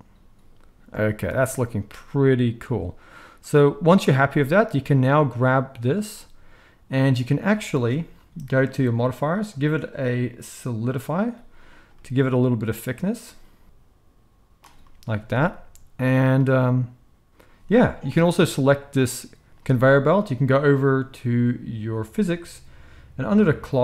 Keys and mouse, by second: 4.7 click, 4.8-8.6 middle drag, 7.6 space, 8.6 click, 8.7-9.4 middle drag, 9.4-18.3 drag, 15.1 alt+a, 18.3-22.0 middle drag, 22.0 click, 22.1-23.8 middle drag.